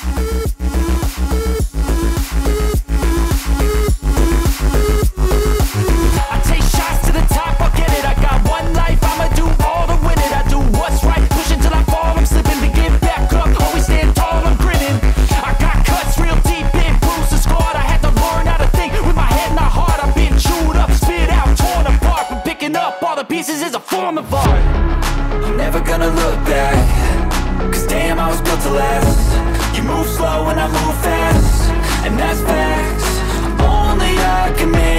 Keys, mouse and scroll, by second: 0.5 ctrl+z, 3.4 right click, 6.2 ctrl+z, 7.0 ctrl+z, 8.0 ctrl+right click, 11.4 ctrl+z, 11.4 ctrl+z, 16.1 ctrl+z, 17.4 right click, 20.3 alt+click, 22.8 ctrl+alt+z, 23.9 ctrl+alt+z, 24.3 ctrl+alt+z, 26.3 double click, 28.3 double click, 28.4 alt+space, 28.4 alt+click.